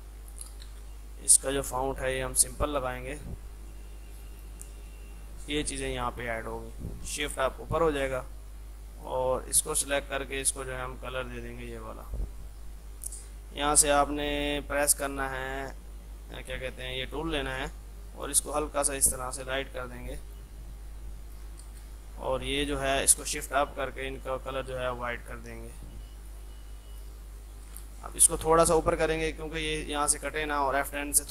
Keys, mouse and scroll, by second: 0.4-1.4 typing, 2.4 click, 3.3 r, 3.9-7.3 drag, 7.3 shift+Page_Up, 8.1 click, 12.0 right click, 17.0-21.7 drag, 21.7 space, 22.0-23.5 drag, 23.5 shift+Page_Up, 23.8 shift+F2, 24.1 F3, 24.5 click, 24.9 F3, 25.8 click, 26.7 F3, 27.0 click, 28.4 Up, 30.3-31.3 drag.